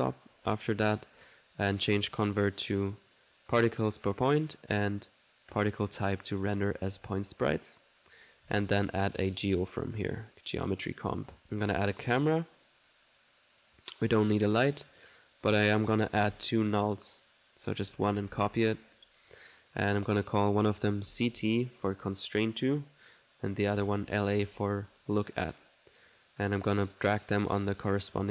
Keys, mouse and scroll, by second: 0.8 click, 0.8 typing, 2.1 click, 3.6 click, 5.5 click, 6.6 click, 7.0 click, 8.0 right click, 8.5 alt+g, 9.0-9.7 typing, 9.2 click, 10.1 click, 10.7 click, 11.1 click, 11.4-12.7 typing, 12.2 click, 12.8 click, 13.1 click, 14.0 click, 15.4 click, 16.8-19.2 typing, 17.1 click, 17.5 click, 18.8 ctrl+click, 19.4 ctrl+click, 20.2 click, 22.2 click, 22.8 click, 25.3 click, 26.7-28.0 drag.